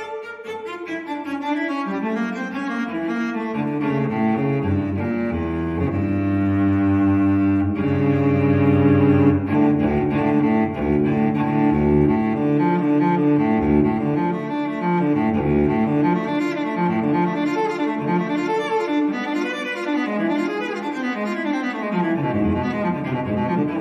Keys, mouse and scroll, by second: 0.2 click, 1.3 click, 3.2 right click, 4.6 click, 5.3 click, 6.1 click, 6.5 right click, 7.7 click, 8.8 click, 10.1 click, 11.2 click, 11.9 click, 12.6 click, 13.1 middle click, 14.1 1, 15.0-15.3 scroll down 2, 15.3 scroll up 1, 15.8 scroll down 1, 16.2 2, 17.1-18.6 scroll down 2, 18.6 scroll up 2, 19.4 scroll up 2, 20.2-20.5 scroll down 2, 20.5-23.8 drag.